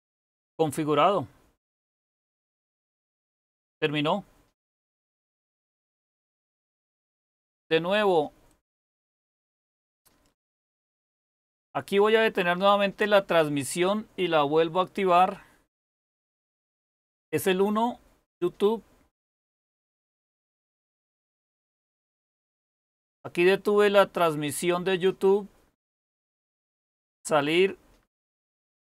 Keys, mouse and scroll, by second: 28.5 Up.